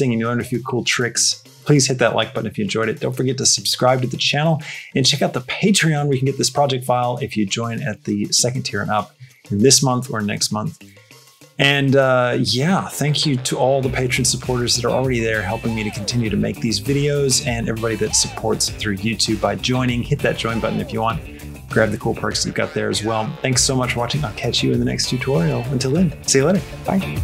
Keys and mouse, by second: 27.0 click.